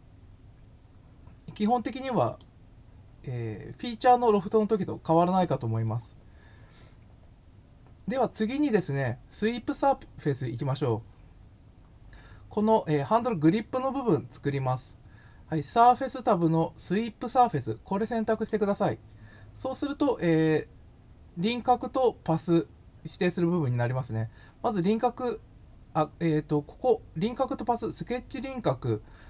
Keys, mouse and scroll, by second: 2.2 click, 11.5 scroll down 1, 11.7 scroll up 1, 18.3 click.